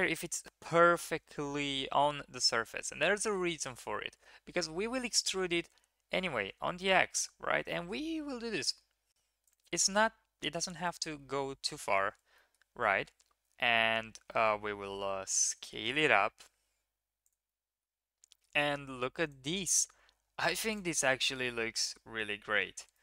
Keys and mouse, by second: 4.9 e, 11.2 KP_1, 12.1 shift+middle click, 14.4 s, 17.4 middle click, 19.4 Tab, 19.7 drag, 19.9 middle click, 21.9 KP_1.